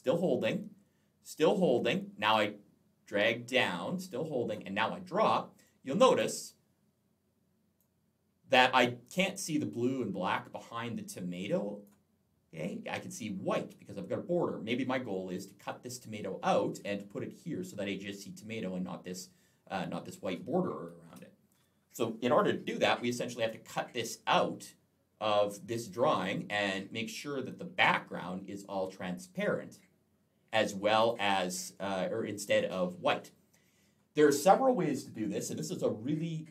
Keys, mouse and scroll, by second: 5.5 click, 8.6 click, 8.7 click, 10.5 click, 14.5 click, 20.9 Delete, 22.2 click, 25.7 click, 30.8 click.